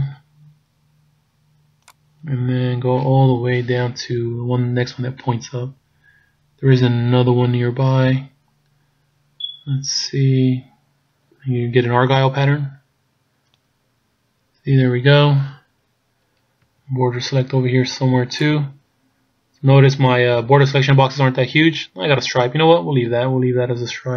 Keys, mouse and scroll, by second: 16.7 b, 23.1 b.